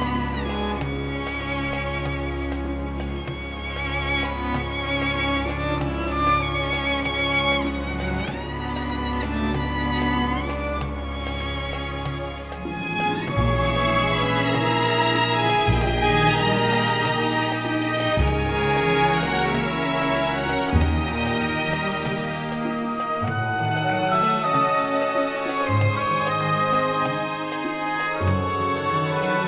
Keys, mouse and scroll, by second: 0.5 0, 1.0 scroll down 1, 2.1 click, 3.0 click, 4.3 ctrl+click, 5.7 click, 7.6 ctrl+click, 8.5 ctrl+click, 9.8 click, 10.8-16.9 drag, 17.0 0, 17.6-17.9 scroll down 2, 18.2-18.9 scroll up 2, 18.9 scroll down 2, 20.8 click, 21.6 right click, 22.9 click, 24.1 click, 27.6 click, 28.6 click.